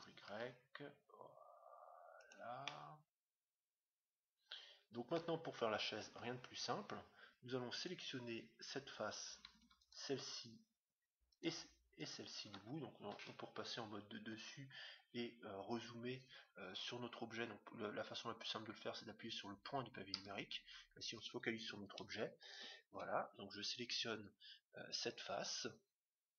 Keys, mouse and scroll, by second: 2.6-4.3 middle drag, 6.0 Tab, 7.7-9.5 right drag, 9.6-13.8 right drag, 13.1 KP_7, 14.2-14.8 scroll up 1, 14.8-16.2 scroll down 1, 16.2 middle click, 16.2 scroll down 1, 22.4-24.2 right drag.